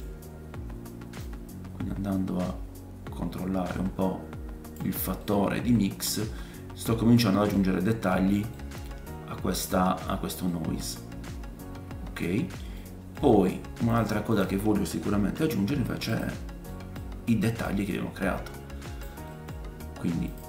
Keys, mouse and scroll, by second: 0.1-1.2 scroll up 3, 1.2 click, 1.2-1.5 scroll up 1, 2.7-3.8 drag, 4.1 click, 5.2 middle click, 7.8-8.2 scroll up 1, 8.5 middle click, 9.3-10.4 scroll down 2, 10.4-10.9 scroll down 1, 12.4 scroll down 1, 13.4 middle click, 13.4 scroll up 2, 13.9-14.3 drag, 14.3 middle click, 14.4-20.4 shift+drag, 15.1 shift+d, 16.7 middle click, 17.9-20.4 middle drag, 17.9-20.4 right drag, 19.6-20.3 scroll up 4.